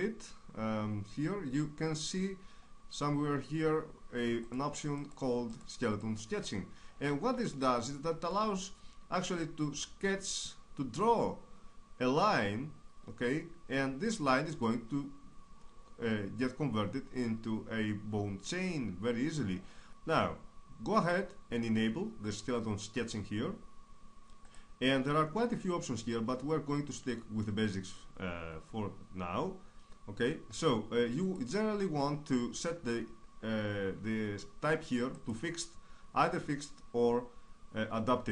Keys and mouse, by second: 4.5-8.1 drag, 8.1-19.9 middle drag, 19.9-38.3 drag.